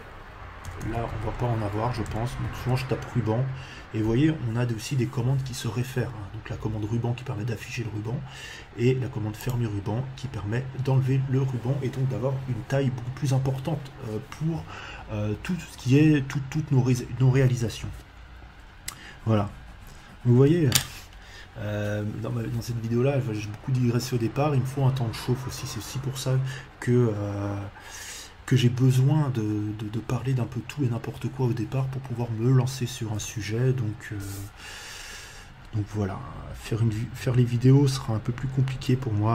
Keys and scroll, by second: 0.6 BackSpace, 1.7 r, 1.8 u, 2.0 b, 2.5 n.